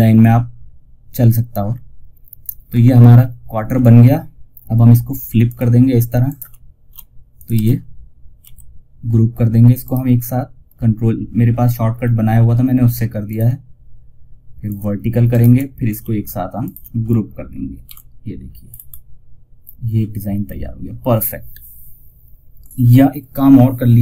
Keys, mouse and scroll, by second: 1.1-1.5 scroll down 1, 4.8 click, 5.5 ctrl+right click, 6.7 shift+click, 6.8 shift+F2, 7.7 1, 9.1 right click, 11.5-12.6 scroll down 1, 12.6 click, 14.6 ctrl+right click, 15.9 shift+click, 17.2 ctrl+g, 18.0 scroll up 1, 19.9-21.6 scroll down 1.